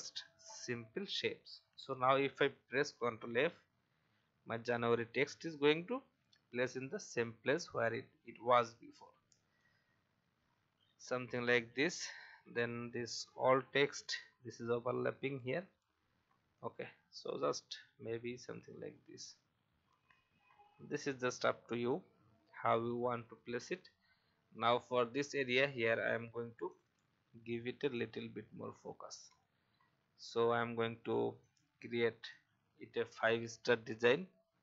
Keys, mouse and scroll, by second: 0.5-1.2 alt+scroll up 1, 1.6 alt+scroll up 1, 2.9 ctrl+f, 7.6-9.1 alt+shift+drag, 10.1 Up, 11.3 click, 12.3 alt+scroll up 1, 13.3 click, 14.4-16.2 alt+shift+drag, 17.5 Left, 18.4-18.8 typing, 21.1 alt+scroll down 1, 21.7 click, 22.8 alt+scroll up 1, 23.4-23.8 scroll up 1, 24.1 alt+scroll up 1, 25.3-26.3 drag, 27.9 alt+shift+click, 29.4 alt+scroll up 1, 29.8 v, 30.2 click, 31.4 alt+click, 33.0 ctrl+d, 33.2 ctrl+d, 33.4 ctrl+d.